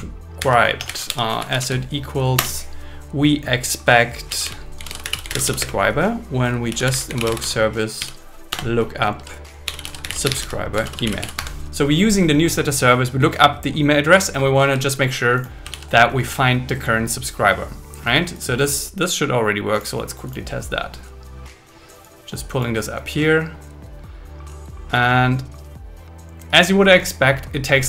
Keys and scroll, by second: 0.8 BackSpace, 1.4 shift+e, 2.4 Return, 5.6 space, 8.5 Return, 11.5 Escape, 14.7 Escape, 15.9 super+s.